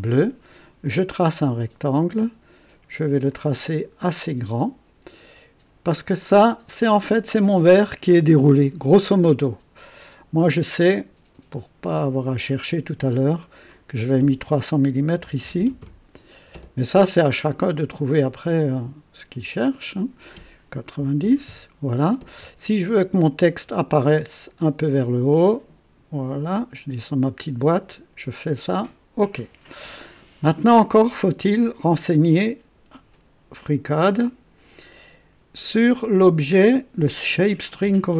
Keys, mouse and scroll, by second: 0.8 click, 1.5-2.1 scroll down 1, 3.3 click, 6.0 click, 9.8 right click, 11.9 click, 13.4 click, 15.1 KP_3, 15.4 KP_0, 15.5 KP_0, 15.8 KP_Enter, 18.5 click, 19.8 click, 21.0 KP_9, 21.2 KP_0, 21.4 KP_Enter, 23.7-27.0 drag, 25.2 typing, 27.5-28.2 typing, 28.7 click, 33.8 click.